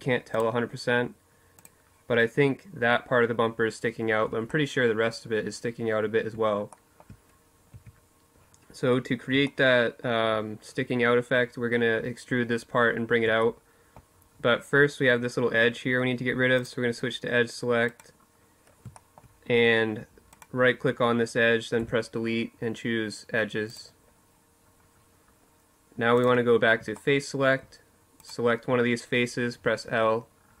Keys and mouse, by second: 3.2-5.0 middle drag, 6.5 Tab, 7.4 middle click, 10.1-14.3 middle drag, 15.3-17.7 drag, 16.6 right click, 17.7-19.0 middle drag, 19.5-21.0 right drag, 20.5 Delete, 24.9-26.9 drag, 27.5 click, 28.6 l, 30.0-30.6 middle drag.